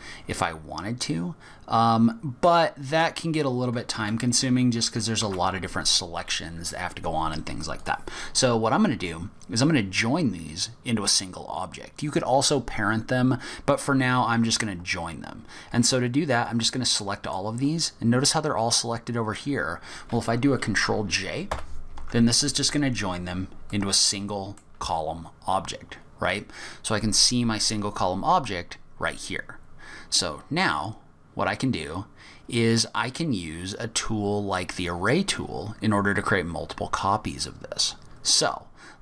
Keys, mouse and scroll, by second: 5.2 ctrl+z, 7.8 click, 8.1-8.9 scroll down 5, 9.2 scroll up 1, 15.4-16.3 scroll down 1, 16.3 click, 21.5 ctrl+j, 23.2-23.7 scroll up 2, 23.7 middle click, 30.1-30.8 scroll down 3, 30.8-31.4 scroll up 2, 31.4-31.9 scroll down 2, 31.9-32.4 scroll up 2, 32.6 scroll down 2, 32.8-33.5 scroll up 2, 33.5-33.8 scroll up 1, 38.3-38.6 scroll down 2, 38.6-39.0 scroll up 2.